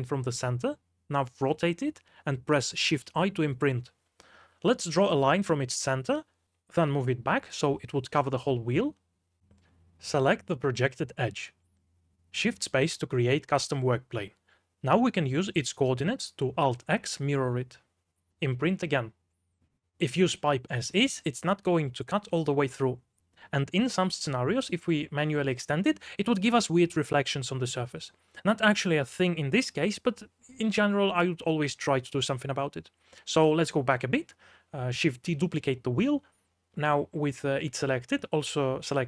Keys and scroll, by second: 0.0-0.3 typing, 1.7 r, 2.3 g, 2.9 shift+i, 3.3 Escape, 4.6-6.6 typing, 10.4-11.3 typing, 13.1 2, 14.3 space, 15.7 shift+z, 18.1 2, 18.4 alt+x, 20.7 space, 21.0 2, 21.9 shift+i, 22.6 2, 24.7 p, 25.9 3, 32.1 3, 32.8 ctrl+z, 34.2 3, 35.2 4, 38.1 shift+d.